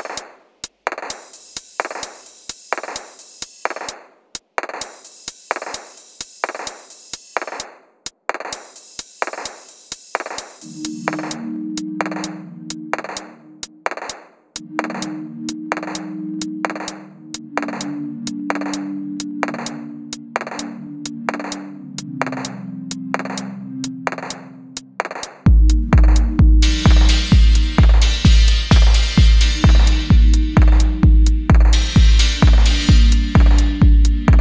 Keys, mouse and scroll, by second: 2.1 scroll down 1, 2.6 middle click, 4.0 double click, 5.0 scroll down 1, 5.3 shift+middle click, 5.6 scroll down 1, 6.8-8.5 scroll up 1, 8.7 double click, 9.1-9.6 scroll down 1, 9.3-10.3 typing, 9.8 middle click, 11.4 shift+scroll down 1, 11.7 middle click, 12.2 shift+middle click, 13.0-13.7 scroll down 2, 13.1 middle click, 13.7 middle click, 15.9 middle click, 19.9 scroll up 1, 20.1 middle click, 21.3 scroll down 1, 21.5 shift+middle click, 24.6 shift+super+Left, 30.2 middle click, 30.5 scroll up 1, 31.3 middle click.